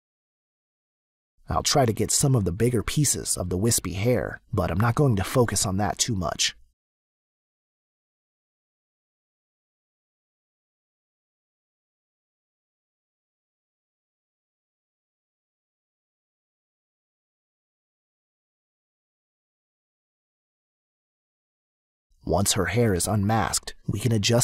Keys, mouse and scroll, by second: 1.3 click, 2.8 click, 3.4 click, 4.0 click, 4.4 click, 5.9 click, 8.9 click, 9.6 click, 10.7 space, 10.8 click, 14.4 click, 16.0 click, 16.2 click, 17.3 click, 19.2 click, 22.0 click.